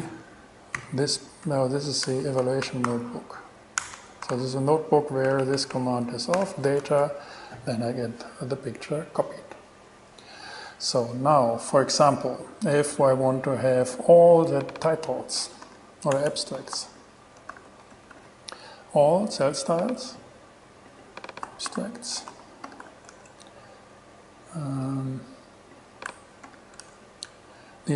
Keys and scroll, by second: 0.1 b, 1.0 ,, 1.7 Left, 2.3 alt+shift+BackSpace, 2.8 alt+shift+e, 3.1 shift+v, 3.9 v, 4.0 Return, 4.5 alt+5, 4.5 alt+6, 5.3 alt+Right, 6.3 alt+Right, 6.6 alt+6, 7.8 shift+Return, 15.6-18.8 typing, 21.2-23.5 typing, 26.3 BackSpace, 26.7 t, 27.0 shift+Return.